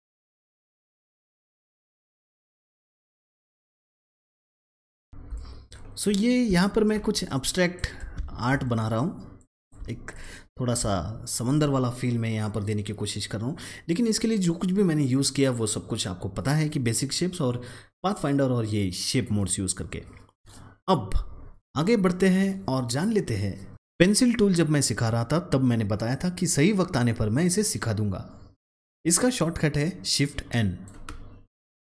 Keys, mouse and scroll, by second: 0.1 ctrl+shift+double click, 0.3 a, 0.4 click, 1.7 click, 1.9 double click, 2.0 click, 2.3 double click, 2.4 click, 3.1 alt+scroll up 1, 3.3 click, 3.4 a, 3.5-4.7 drag, 5.0 alt+scroll down 1, 5.1 alt+scroll up 1, 6.0 click, 6.3 alt+click, 7.2-8.5 drag, 8.5 double click, 9.8 alt+scroll down 1, 10.1 alt+click, 10.5 alt+scroll up 1, 23.7-30.3 drag, 31.5 click.